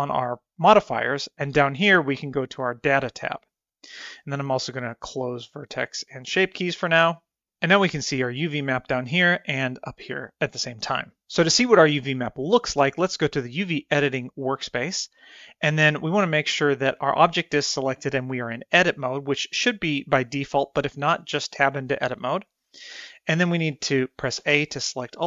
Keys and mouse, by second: 0.7 click, 5.1 click, 5.6 click, 24.4 a.